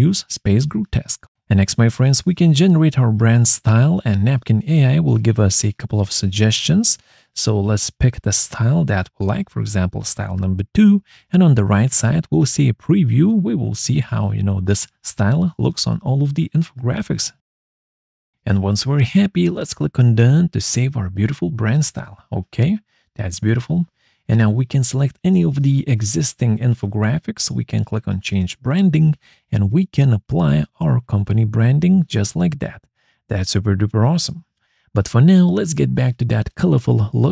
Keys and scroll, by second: 37.1 ctrl+z.